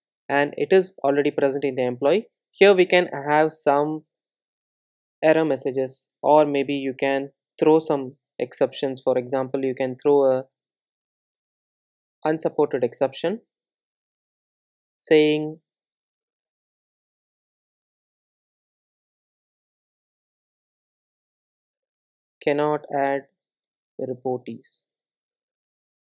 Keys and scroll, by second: 3.6 Tab, 7.8 super+z, 13.3 Return.